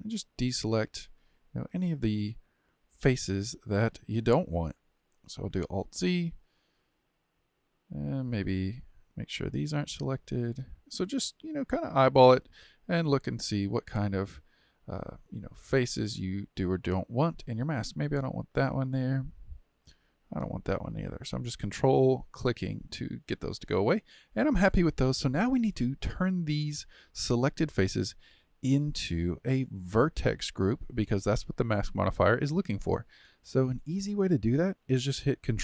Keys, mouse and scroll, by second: 1.2-4.3 middle drag, 5.6 alt+z, 6.5-9.2 middle drag, 9.2-10.2 ctrl+drag, 10.2-18.4 middle drag, 18.4 ctrl+click, 18.9-21.1 middle drag, 21.1-22.8 ctrl+drag, 22.8-27.7 middle drag.